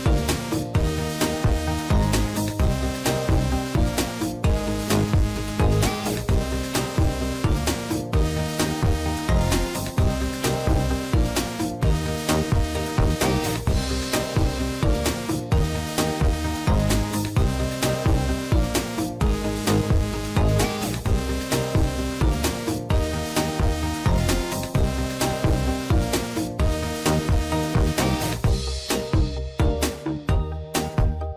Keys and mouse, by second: 2.6-3.8 drag, 4.3 shift+middle click, 6.0 a, 8.0 n, 9.6 shift+middle click, 10.8 shift+middle click, 12.2 shift+middle click, 13.6 click, 13.9-15.4 drag, 15.7 shift+middle click, 16.4 click, 16.9 click, 17.2-18.7 drag, 19.0 shift+middle click, 19.5 click, 20.0 click, 20.2-21.2 drag, 21.5 shift+middle click, 22.5 click, 22.7 click, 23.4 shift+middle click, 24.5 click, 25.4 shift+middle click, 27.2 shift+middle click, 27.9 shift+middle click, 28.5 shift+middle click, 30.0 shift+middle click, 30.6 click.